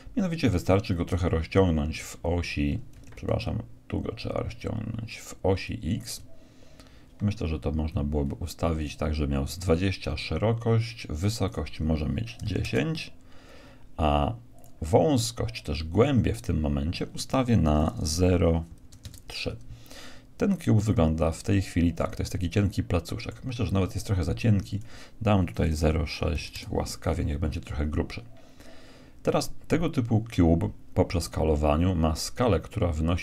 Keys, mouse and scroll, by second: 0.8-2.6 drag, 5.6-7.4 drag, 11.4-13.4 drag, 14.5-16.3 drag, 20.8-24.2 middle drag, 24.7-26.6 drag.